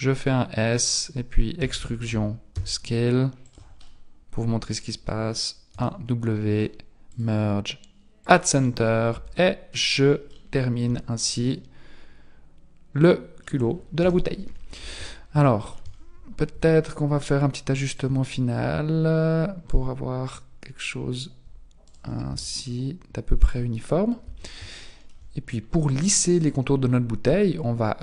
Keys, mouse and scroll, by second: 1.6 e, 3.9 middle click, 5.7 w, 9.1 Tab, 9.7 middle click, 10.9 z, 11.3 middle click, 14.0 KP_1, 14.8 z, 15.5 shift+middle click, 15.9-16.5 scroll up 3, 16.5 Tab, 16.5 scroll up 1, 17.9 click, 21.8 alt+right click, 22.3 s, 23.7-24.2 scroll down 6, 24.2 Tab, 24.8 shift+middle click, 25.5 scroll down 2.